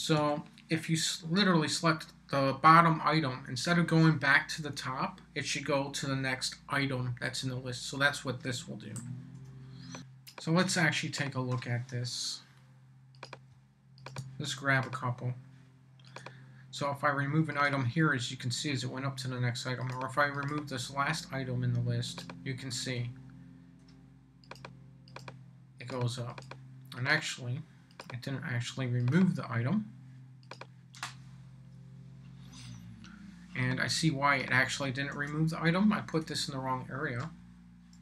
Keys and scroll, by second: 0.0-0.7 typing, 8.5 Down, 9.3 BackSpace, 35.1 super+c, 36.2 BackSpace, 37.4 Down.